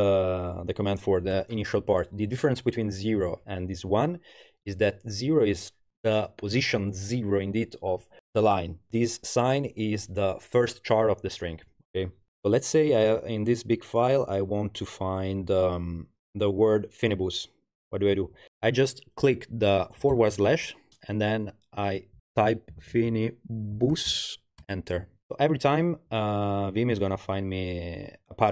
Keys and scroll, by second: 20.1 shift+7, 22.5-24.6 typing.